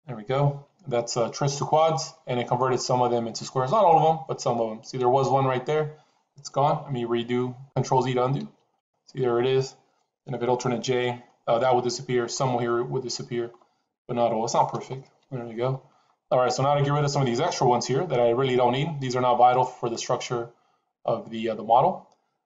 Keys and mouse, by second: 8.3 ctrl+z, 14.7 alt+j.